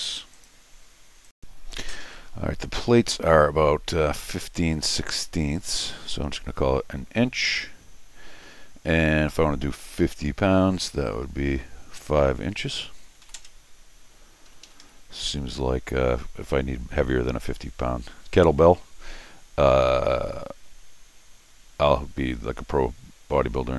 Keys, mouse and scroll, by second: 0.3 click, 1.2 click, 5.6 click, 13.2 5, 14.5 Escape, 14.6 Escape, 14.8 Escape.